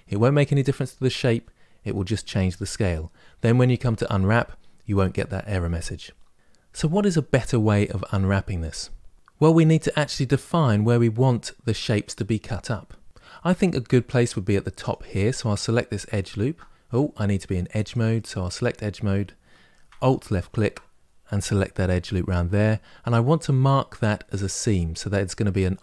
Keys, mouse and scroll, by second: 3.2 Tab, 14.6 alt+click, 17.6 click, 24.7-25.8 middle drag.